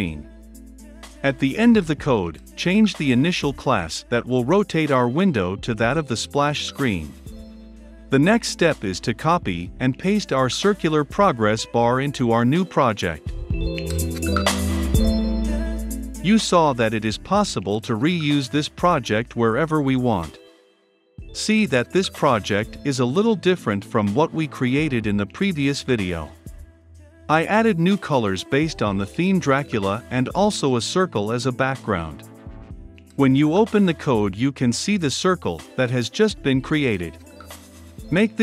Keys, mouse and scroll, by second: 1.7 click, 2.2-3.2 typing, 5.0 ctrl+F5, 6.7-8.5 drag, 9.8-11.0 drag, 11.0 Return, 11.1-13.4 typing, 13.0-14.1 drag, 14.1-16.5 scroll down 2, 16.5 right click, 16.7 click, 16.9 Up, 17.0-18.6 typing, 19.2-26.6 drag, 26.6-27.3 right drag, 27.3-30.1 drag, 32.0-35.8 drag.